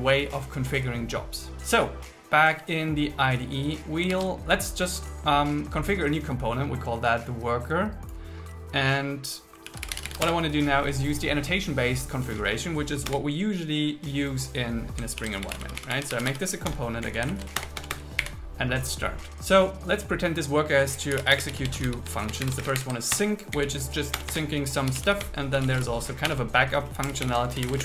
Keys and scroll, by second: 4.3 super+1, 9.7 shift+w, 10.3 Return, 13.1 Return, 15.2 alt+l, 15.5 shift+c, 16.7 Return, 17.1 Down, 17.5 super+Up, 17.6 Return, 18.3 Up, 21.4-23.0 typing, 23.2 Return, 23.6 Down, 24.2 Return, 25.3 space, 26.3 BackSpace, 27.6 shift+9.